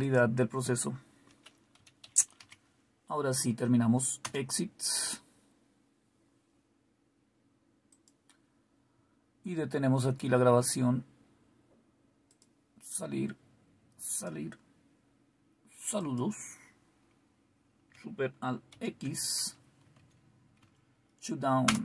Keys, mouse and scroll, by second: 0.0 click, 1.5-2.9 typing, 4.2 Return, 7.9 click, 7.9 typing, 11.7 typing, 12.2 click, 14.0 click, 15.9 click, 18.6 super+x, 19.9 Tab, 20.1 Right, 20.5 Down, 21.5 Return.